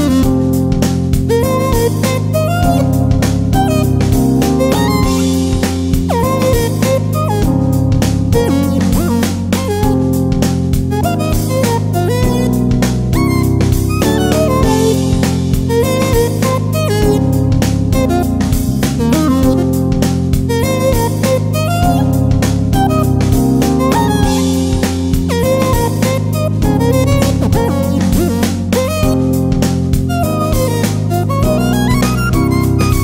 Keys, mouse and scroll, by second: 0.4 alt+scroll down 1, 2.7-5.0 scroll down 1, 5.7-13.9 drag, 13.9-18.6 alt+shift+drag, 22.4 click, 26.0 click.